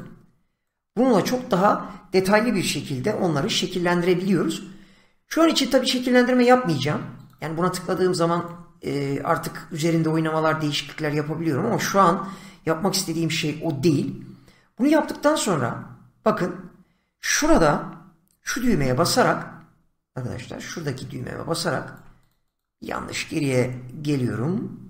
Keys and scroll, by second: 18.7 <, 23.5 <.